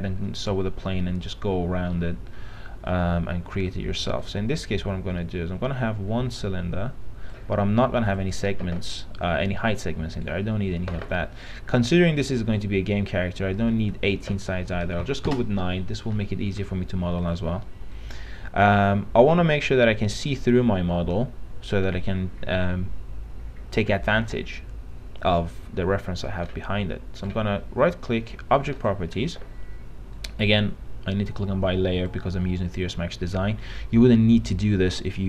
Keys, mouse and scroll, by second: 2.1-3.4 middle drag, 3.6 e, 4.4-8.3 drag, 10.3 right click, 12.0-13.6 middle drag, 13.8 click, 15.3 KP_9, 16.4 middle click, 17.5-19.7 drag, 27.4 right click, 29.0 click.